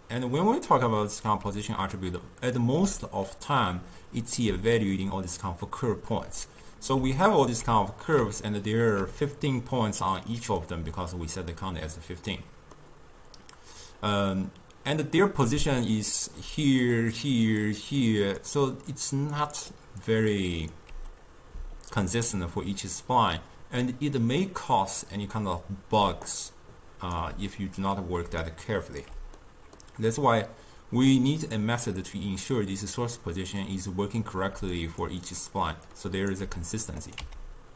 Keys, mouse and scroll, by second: 1.5 d, 1.6 click, 2.6 d, 3.6 d, 7.3 alt+shift+click, 8.6-15.4 ctrl+middle drag, 16.7-21.2 typing, 16.7 click, 17.4 click, 17.7 click, 18.1 click, 18.5 click, 19.0 click, 19.5 click, 20.1 click, 20.6 click, 26.1 d, 26.4 right click, 27.3 d, 28.3 d, 28.4 d, 28.6 right click, 29.1 d, 29.5-32.5 middle drag, 32.7-34.6 drag, 34.6 d, 34.8 click, 35.1 d, 35.3 click, 35.5-36.0 d, 36.1 right click, 36.4 d, 37.1 click.